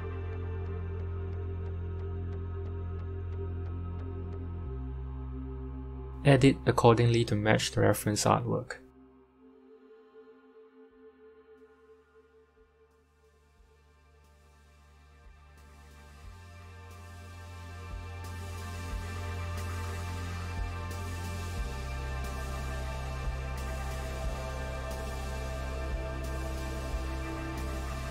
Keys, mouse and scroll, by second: 1.3-1.7 scroll up 2, 1.7 shift+middle click, 2.1-2.8 scroll up 1, 2.8 scroll up 1, 3.0 Tab, 3.5 click, 4.7 click, 5.2 x, 6.4 Tab, 7.2-7.9 scroll down 3, 7.9 scroll down 1, 8.1-9.3 scroll up 4, 9.3 g, 12.0 KP_7, 12.6-14.1 scroll down 10, 14.1 scroll down 1, 14.1 s, 15.6-17.8 drag, 17.7 s, 21.9-25.8 middle drag, 25.8 click, 27.1-28.1 scroll up 3.